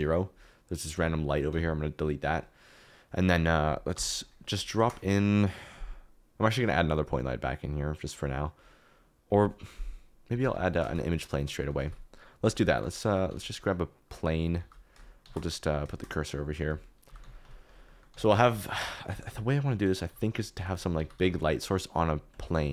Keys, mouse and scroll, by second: 1.1 middle click, 1.5 typing, 3.9 click, 4.8 shift+a, 10.8 shift+a, 11.8-13.3 typing, 14.1 click, 14.6 alt+g, 15.2 shift+s, 15.9 shift+s, 17.0-21.1 typing, 17.6 click, 18.0 click, 18.7 shift+middle click, 22.3 click.